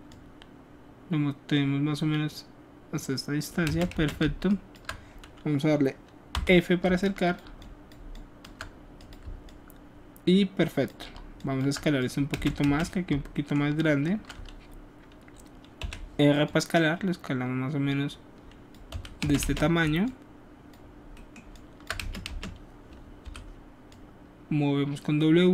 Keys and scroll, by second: 3.7 space, 3.9 space, 6.3 f, 6.8 alt+f, 12.3 alt+space, 15.8 r, 19.2 space, 19.4 space, 22.0 space, 22.3 space, 23.2 w.